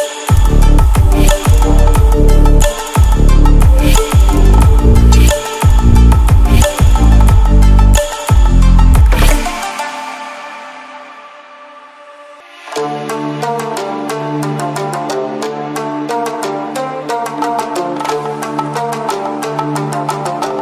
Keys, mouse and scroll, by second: 1.8 ctrl+alt+scroll up 1, 2.6 ctrl+alt+scroll up 1, 4.1-8.5 drag, 16.2 Caps_Lock, 16.9-19.5 typing.